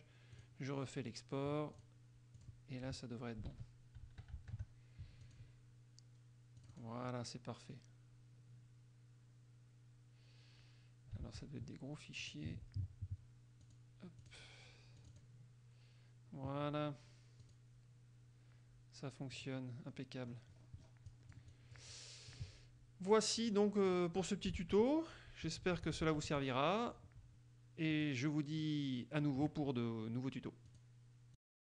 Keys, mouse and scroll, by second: 0.5 click, 1.9 click, 2.5 click, 3.7 alt+Tab, 5.4 click, 6.8 click, 11.4 alt+Tab, 12.4 alt+click, 13.8 click, 14.4 click, 15.1 click, 17.6 click, 19.6 click, 20.5-21.2 scroll up 2, 21.3-22.7 drag, 23.6 click, 24.0 click, 24.8 alt+Tab, 25.5 alt+Tab, 28.1 click, 28.8-29.9 middle drag, 30.8 click, 31.6 click.